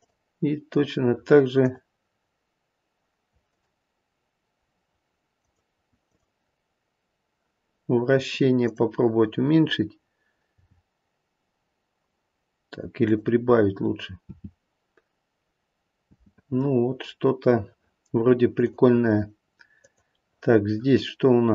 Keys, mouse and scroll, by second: 0.0 click, 1.5 click, 3.5 click, 5.3 click, 6.0 click, 8.6 click, 10.5 g, 14.2 space, 16.1 space, 18.6 click, 19.8 click.